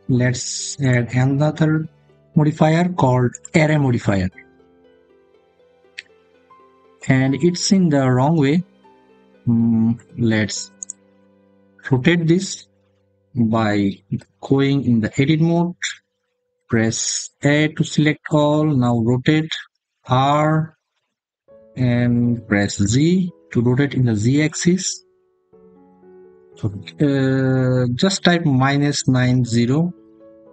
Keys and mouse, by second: 0.7-3.4 drag, 14.0 Tab, 16.4 a, 19.5 r, 22.7 z, 28.7 -, 28.7 9, 29.0 0.